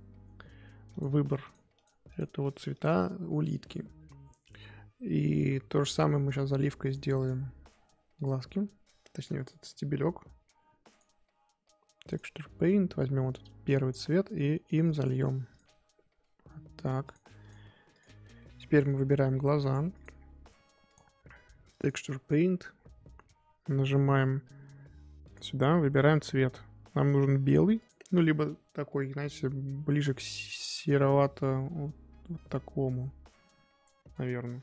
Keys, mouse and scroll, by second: 1.0 click, 1.5 click, 1.8 click, 2.1 click, 2.8 click, 7.2 drag, 7.4-8.2 scroll up 2, 8.2 click, 8.4-11.6 scroll up 2, 12.1-13.6 drag, 15.5-18.0 drag, 18.4-20.0 middle drag, 20.0 click, 21.8-27.8 drag.